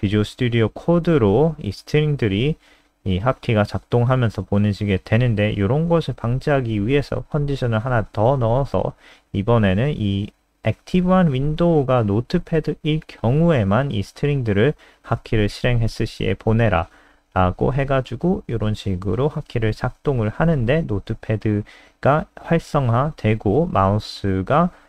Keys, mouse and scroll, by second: 2.0 alt+F4, 2.3 click, 2.7 ctrl+z, 3.8 ctrl+z, 4.0 ctrl+z, 4.1 ctrl+z, 4.3 ctrl+z, 4.9 ctrl+z, 5.5 click, 7.7 ctrl+s, 8.2 F5, 9.3 super+n, 10.6 click.